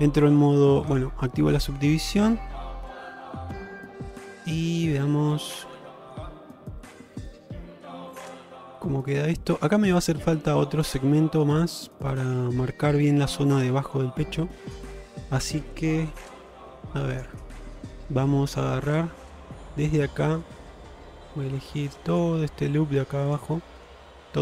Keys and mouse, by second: 1.0 click, 1.4-5.9 middle drag, 6.1 shift+middle click, 6.4 middle click, 8.1 middle click, 9.2 middle click, 10.2 shift+middle click, 10.6 middle click, 12.4 middle click, 13.6 middle click, 14.6 middle click, 16.3 2, 17.2 click, 17.5-18.9 middle drag, 20.1 middle click, 22.2 shift+click, 22.5 middle click, 23.8 shift+click, 24.1 middle click.